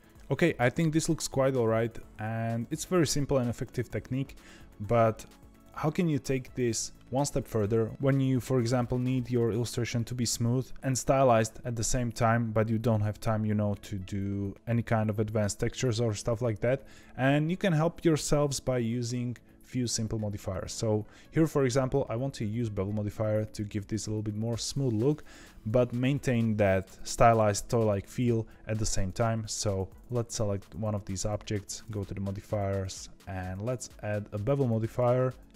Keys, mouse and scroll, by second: 29.4 click, 31.6 click, 32.7-35.5 drag.